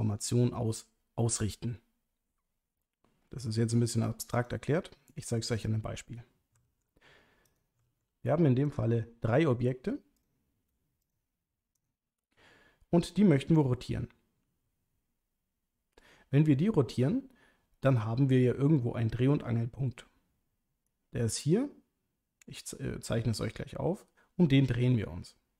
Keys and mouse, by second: 4.3 click, 6.6 shift+d, 7.5 click, 7.9 shift+d, 8.7 click, 11.8 shift+click, 14.5 r.